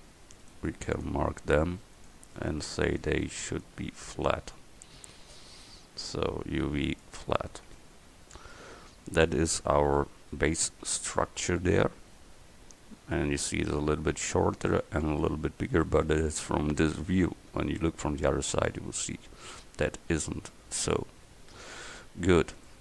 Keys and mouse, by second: 0.5-1.6 right drag, 7.7 Tab, 9.0 click, 22.5-22.8 middle drag.